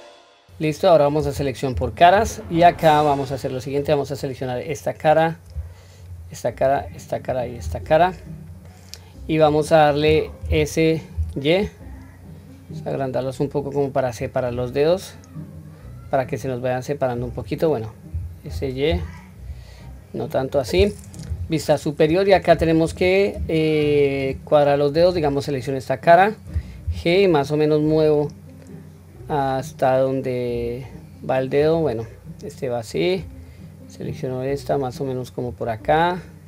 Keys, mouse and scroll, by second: 0.4 middle click, 1.4 3, 1.9-2.7 scroll up 1, 2.7-3.5 middle drag, 2.7-3.1 scroll up 1, 4.1 click, 5.7 shift+click, 6.4 shift+click, 7.0 shift+click, 7.9-8.4 scroll down 1, 8.4 middle click, 10.2 s, 14.2-14.6 scroll down 1, 14.6-17.0 middle drag, 21.0 KP_7, 21.8-22.3 scroll down 1, 22.7-23.1 scroll down 1, 23.4 shift+middle click, 23.4-23.9 scroll up 2, 24.7 click, 26.6 g, 32.9 click, 33.8-35.3 drag.